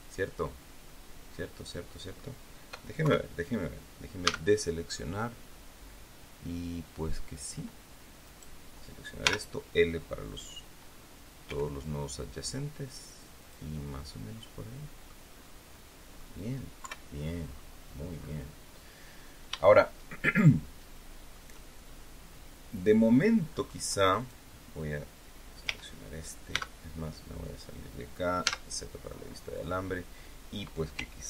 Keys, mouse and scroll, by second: 0.4 scroll down 1, 0.8-2.3 middle drag, 2.9 KP_3, 4.1 a, 8.2 right click, 9.1 l, 11.4 g, 13.3 click, 13.6-15.2 middle drag, 15.2-15.6 scroll down 1, 15.6 scroll up 1, 15.6 middle click, 16.7 KP_3, 17.4-17.7 scroll down 2, 18.1 scroll up 2, 19.0 scroll down 2, 19.6-21.4 shift+middle drag, 23.0 scroll down 2, 23.4-23.7 scroll up 2, 24.0 right click, 25.6 l, 26.4 Tab, 27.1 scroll down 2, 28.3 z, 29.2 scroll up 2, 29.6 scroll down 2.